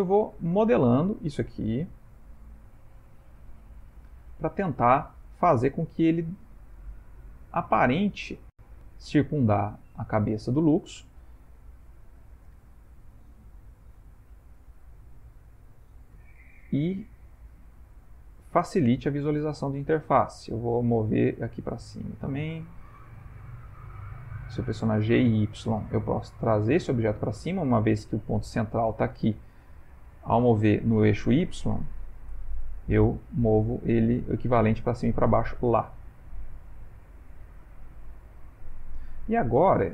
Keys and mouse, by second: 4.4 middle click, 4.5 middle click, 5.9 middle click, 7.8 middle click, 8.2 middle click, 9.8 middle click, 12.7 middle click, 13.7 s, 15.5 middle click, 16.2 g, 18.9 middle click, 19.0 middle click, 22.9 middle click, 23.5 g, 28.7 middle click, 29.2 middle click, 29.8 ctrl+middle click, 30.3 ctrl+middle click, 30.8 middle click, 32.5 g, 37.4 middle click, 38.5 middle click, 38.6 ctrl+middle click, 39.1 ctrl+middle click, 39.2 middle click.